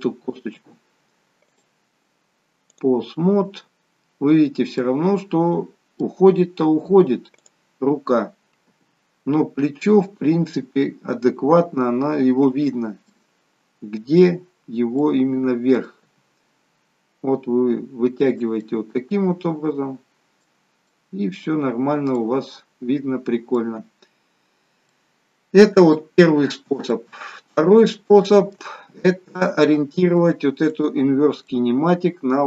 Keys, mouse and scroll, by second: 1.6 click, 5.1 middle click, 7.5 click, 8.9 g, 13.4 middle click, 15.1 middle click, 16.2 g, 18.7 middle click, 21.0 middle click, 21.8-22.7 scroll up 2, 22.3 middle click, 23.9 scroll down 2, 24.8 scroll down 3, 25.0 middle click, 26.0 shift+middle click, 27.0 middle click, 28.0 shift+middle click, 28.9 scroll up 4, 29.4 shift+middle click, 30.8 click, 31.6 middle click.